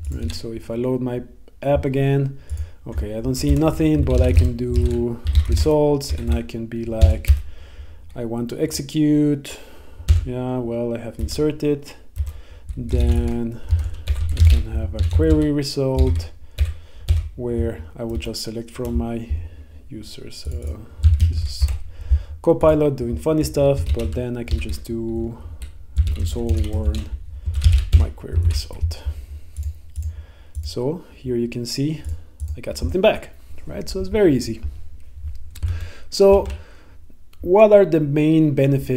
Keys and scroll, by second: 3.4 Return, 5.7 Return, 7.1 Tab, 7.4 Return, 10.1 Tab, 11.3 Return, 17.1 Tab, 18.3 Return, 21.8 Return, 28.0 Tab, 28.5 super+s, 35.7 super+Tab.